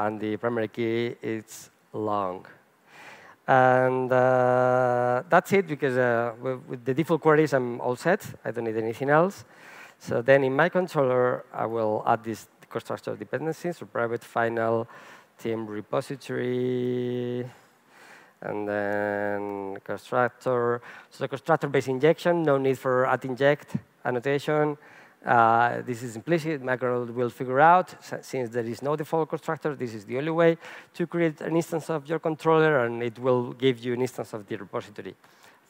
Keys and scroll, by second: 13.1 Return, 19.1 alt+Return.